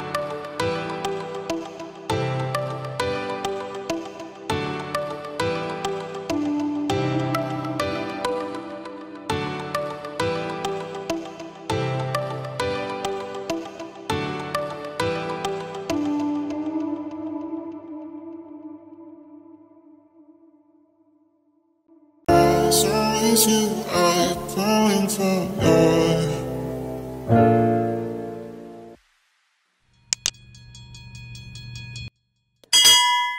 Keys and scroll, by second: 10.2 ctrl+j.